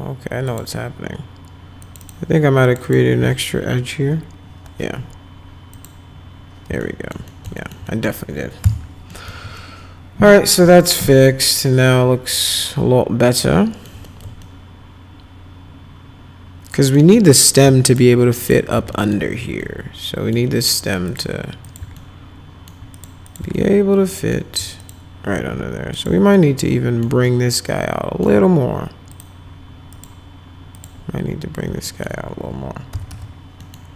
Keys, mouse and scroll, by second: 0.5 click, 1.8 click, 2.0 click, 2.6 click, 2.8 click, 4.0 ctrl+BackSpace, 5.7 click, 6.8 alt+middle click, 7.3 middle click, 7.6 alt+middle click, 7.9 middle click, 8.6 F4, 9.1 middle click, 9.6-13.9 alt+middle drag, 14.1 middle click, 14.4-16.9 alt+middle drag, 17.4 click, 17.9 ctrl+click, 18.4 ctrl+click, 18.9 alt+right click, 19.2 alt+q, 19.6 alt+right click, 21.1 click, 21.7 click, 21.9 alt+right click, 22.1 alt+middle click, 22.9 click, 23.3 click, 23.5 alt+middle click, 24.8 click, 25.9 click, 26.3 alt+middle click, 27.2 alt+middle click, 29.1 click, 29.9 click, 30.8 click, 31.8 alt+middle click, 32.7-33.6 typing, 33.6 middle click.